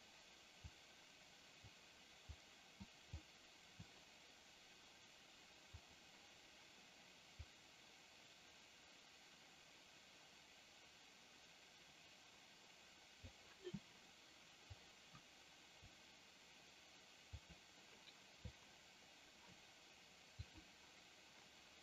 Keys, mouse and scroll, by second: 0.6-1.7 drag, 2.3 click, 3.1 click, 5.7 click, 7.4-13.2 drag, 14.7-15.8 drag, 20.4 click.